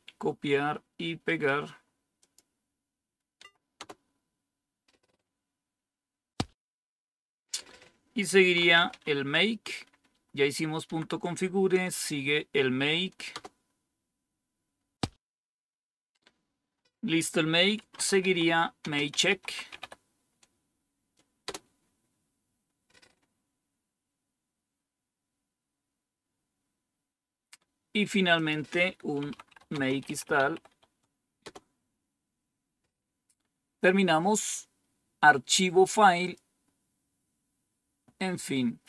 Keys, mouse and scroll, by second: 2.1 click, 3.3 Tab, 3.7 Return, 8.1-9.3 typing, 10.0 Up, 10.8 Down, 13.3 Return, 17.5-20.2 typing, 21.4 Return, 24.8-28.3 scroll down 2, 28.3 click, 28.8 click, 29.0-31.4 typing, 34.3 scroll down 1, 36.2 click.